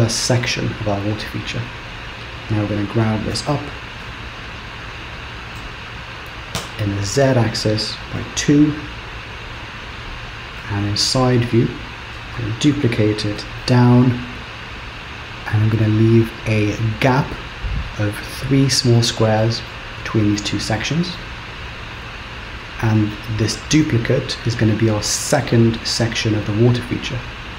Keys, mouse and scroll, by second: 1.4-2.0 scroll down 1, 2.0-2.5 scroll down 3, 2.5-3.1 scroll up 2, 3.1 g, 5.7 g, 10.7 KP_3, 12.4 shift+d, 16.8-17.8 scroll up 4, 19.1 shift+middle click, 19.7 middle click, 20.8 middle click, 21.9-23.8 scroll down 3.